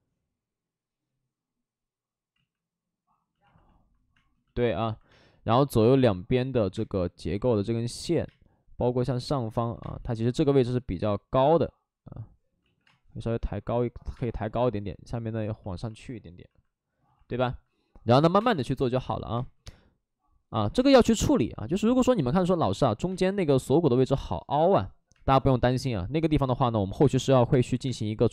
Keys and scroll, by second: 2.3 ctrl+z, 4.1 space, 5.0 space, 5.7 space, 6.7 space, 8.2 space, 9.5 ctrl+z, 9.7 space, 12.5 ctrl+z, 12.8 space, 14.1 space, 18.2 5, 18.3 space, 19.3 space, 20.5 ctrl+z, 20.7 space, 25.1 space, 26.5 ctrl+z, 27.4 space, 27.6 ctrl+z.